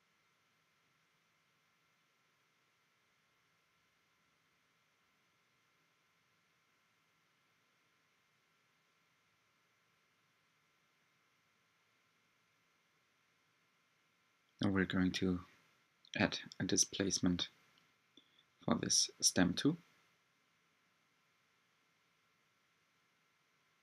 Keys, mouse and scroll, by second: 1.9-2.9 scroll down 5, 2.9-4.4 middle drag, 4.4 Tab, 4.9-5.9 middle drag, 5.9 Tab, 7.2 ctrl+click, 8.8 ctrl+click, 10.2-10.7 scroll up 3, 12.5 alt+click, 13.6 g, 18.1 g, 20.7-21.2 scroll down 3, 21.3 Tab, 22.5-23.8 middle drag.